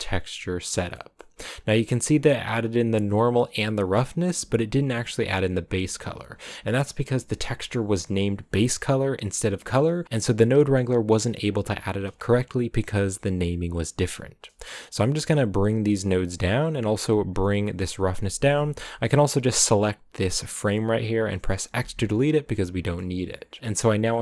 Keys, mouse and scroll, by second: 0.0-1.1 drag, 1.1 middle click, 1.4 a, 2.8-3.3 scroll up 3, 3.3 click, 4.6 g, 5.1 scroll down 1, 5.6-6.1 scroll down 1, 6.1-10.0 scroll up 1, 16.2 g, 17.0 right click, 17.5 g, 19.3 right click, 21.8 x, 22.2 click, 22.8-24.2 middle drag.